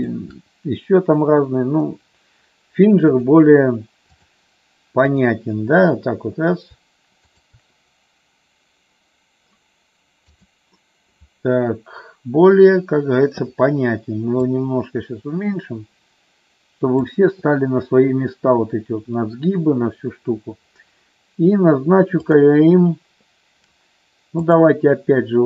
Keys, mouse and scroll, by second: 3.2-4.3 drag, 5.2 click, 7.3-9.1 shift+drag, 14.5-16.9 drag, 24.5-25.4 drag.